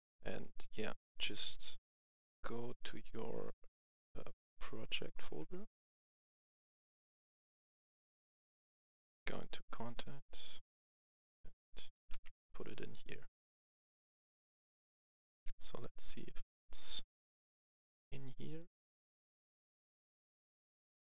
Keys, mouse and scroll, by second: 1.4 click, 5.0 right click, 6.5 click, 12.0 ctrl+v, 13.5 click, 18.8 click, 19.5 click.